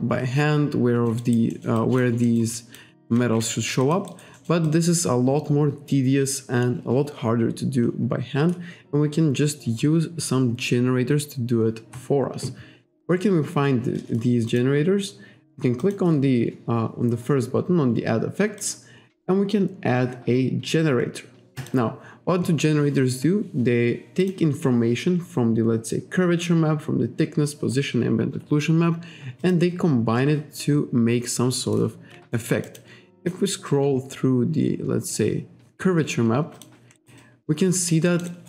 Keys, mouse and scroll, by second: 1.2 alt+right click, 1.5 alt+middle click, 1.9 alt+click, 2.3 alt+middle click, 2.6 alt+click, 3.2 ctrl+z, 3.8 alt+click, 4.7 alt+click, 14.5 click, 15.8 click, 18.6 click, 21.6 click, 24.2 click, 24.8-25.2 scroll down 1, 29.4 click, 30.7-31.1 scroll down 1, 32.3 alt+middle click, 32.7 alt+click, 33.2 click, 33.8-34.3 scroll down 1, 35.2-35.6 scroll down 1, 36.6 click, 37.0 alt+right click, 37.2 alt+click, 38.1 alt+middle click, 38.3 alt+right click.